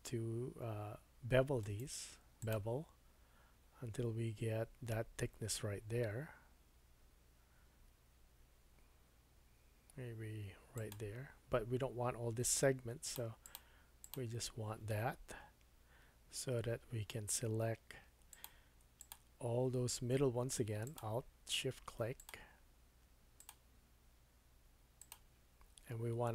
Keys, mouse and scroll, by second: 1.6-13.0 right drag, 13.0-18.4 drag, 19.0 alt+click, 20.8 alt+shift+click, 22.1 alt+shift+click, 23.4 alt+shift+click, 25.0 alt+shift+click.